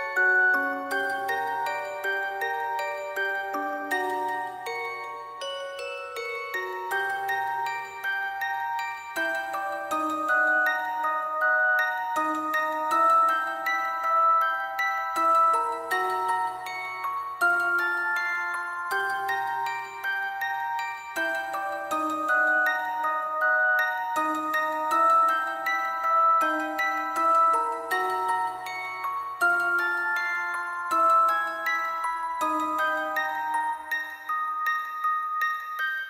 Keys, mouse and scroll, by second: 0.4 double click, 0.4 alt+click, 1.2 ctrl+click, 1.7 alt+click, 2.4 double click, 2.7 ctrl+click, 3.3 alt+click, 3.7 ctrl+click, 3.9 alt+click, 4.1 shift+click, 4.5 shift+click, 4.6 alt+click, 4.8 alt+click, 5.1 shift+click, 5.2 ctrl+click, 6.3 alt+click, 6.7 w, 8.1-9.4 typing, 9.1 alt+click, 9.3 double click, 9.6 ctrl+click, 10.2 double click, 10.6 typing, 11.1 double click, 11.2 ctrl+click, 11.9 double click, 12.7 double click, 13.4 double click, 14.1 double click, 14.4 alt+click, 15.1 double click, 15.3 alt+click, 15.7 double click, 16.1 double click, 16.7 alt+click, 16.8 ctrl+click, 17.4 shift+click, 18.0 shift+click, 18.8 alt+shift+click, 19.1 alt+shift+click, 19.3 alt+click, 19.5 alt+click, 19.8 alt+click, 20.5 double click, 21.7 double click, 22.5 double click, 23.8 double click, 24.3 double click, 24.6 ctrl+click, 24.7 alt+click, 25.1 alt+click, 25.7 double click, 28.3 alt+click, 28.8 double click, 29.3 ctrl+click, 29.6 double click, 29.9 alt+click, 30.2 double click, 31.0 ctrl+click, 31.4 double click, 31.9 double click, 34.7 ctrl+click, 35.1 alt+click, 35.6 double click, 35.7 alt+click, 35.8 alt+double click, 35.9 alt+click.